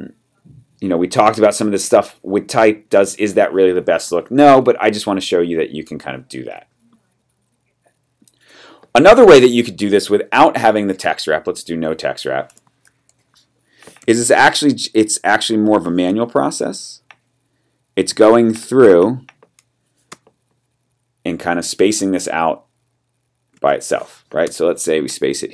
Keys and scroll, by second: 4.5 v, 12.8 super+=, 14.0 t, 16.2 Left, 20.1 space, 24.4 BackSpace.